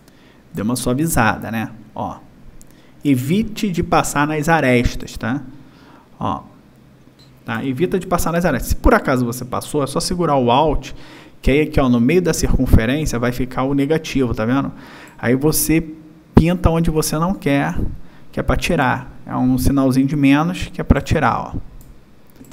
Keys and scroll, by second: 3.0 space, 7.1 space, 22.4 space.